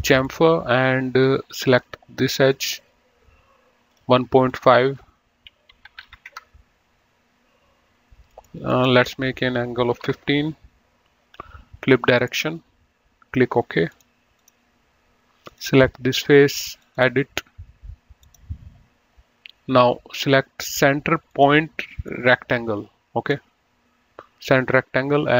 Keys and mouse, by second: 2.6 click, 4.2 click, 6.1 KP_1, 6.2 KP_Decimal, 6.4 KP_5, 6.7 KP_Enter, 8.6 click, 10.1 KP_1, 10.2 KP_1, 10.5 Return, 12.5 click, 14.2 click, 15.8 click, 16.9 click, 18.6 click, 21.6 click.